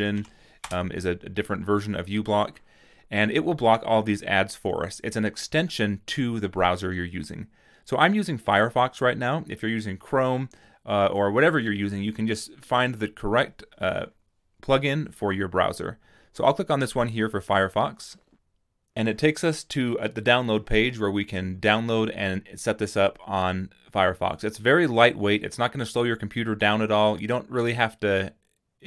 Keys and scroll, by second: 0.0-0.6 typing.